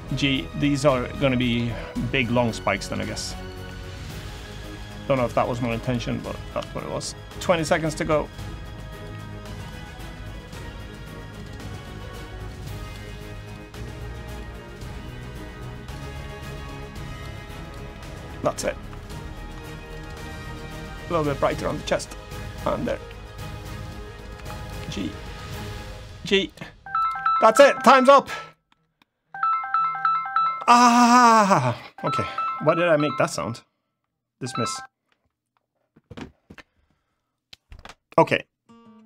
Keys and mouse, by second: 0.3 click, 0.3 g, 0.7 middle click, 1.1 click, 2.1 click, 2.1 g, 2.4 middle click, 3.1 click, 3.9 click, 3.9 g, 4.4 click, 5.2 right click, 5.2 g, 6.1 click, 6.1 g, 6.4 shift+middle click, 7.3 click, 8.3 click, 8.3 g, 8.6 click, 9.3 click, 9.3 g, 10.2 g, 11.4 click, 12.1 click, 12.5 click, 12.5 g, 13.1 click, 13.8 g, 14.0 click, 14.5 click, 15.5 click, 15.5 g, 15.9 middle click, 16.5 3, 17.6 middle click, 18.2 middle click, 18.6 3, 19.0 middle click, 19.9 shift+click, 20.6 g, 21.3 click, 22.8 g, 23.3 click, 23.6 middle click, 24.1 1, 24.3 click, 24.5 g, 25.0 click, 26.2 click, 26.2 g, 26.7 click, 27.0 g, 27.2 click, 27.5 Tab, 27.9-28.4 middle drag, 28.7-30.3 middle drag.